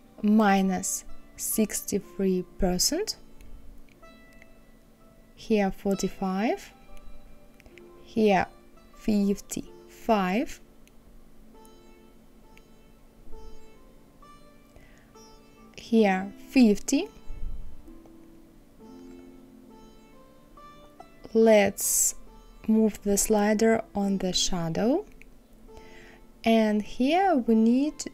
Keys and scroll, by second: 0.7 KP_Subtract, 1.5 KP_6, 1.9 KP_3, 12.8 KP_5.